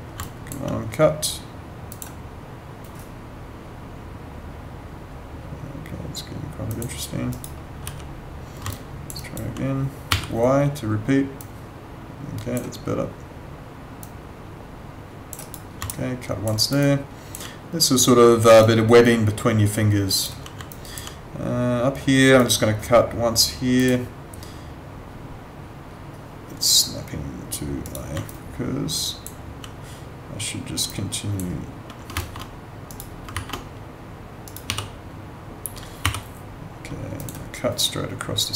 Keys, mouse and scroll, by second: 6.7 click, 7.3 right click, 7.8 w, 8.7 alt+click, 9.2 alt+right click, 10.1 y, 11.4 click, 14.0 click, 15.4 right click, 15.9 alt+click, 16.5 alt+right click, 16.8 alt+click, 18.6 alt+click, 20.7 alt+click, 27.8 right click, 28.2 alt+click, 30.8 click, 32.1 ctrl+z, 32.9 right click, 34.4 right click, 34.6 w, 36.0 y, 37.2 click.